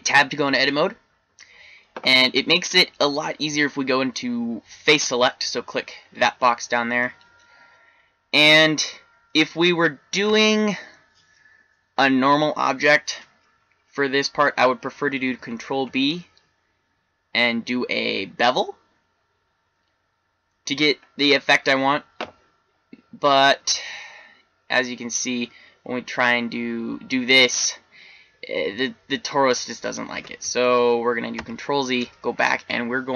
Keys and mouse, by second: 3.3 click, 6.5-12.3 middle drag, 15.3 ctrl+b, 21.3-23.5 middle drag, 23.5 e, 30.5 ctrl+z, 31.3 ctrl+z.